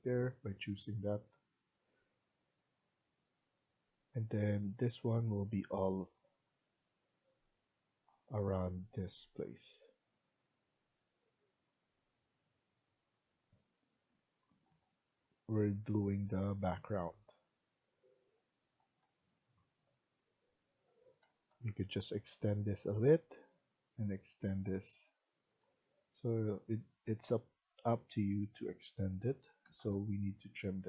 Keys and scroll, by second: 1.6 Escape, 18.9 Escape, 21.1 Escape, 21.5 Escape, 25.5 Escape, 27.9 Escape, 29.3-30.2 typing.